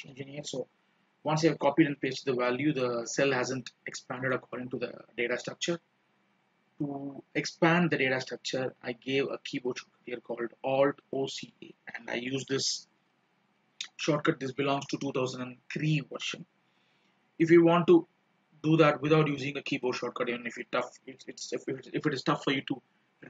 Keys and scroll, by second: 12.5 alt+o, 13.2 alt+c, 13.4 alt+a.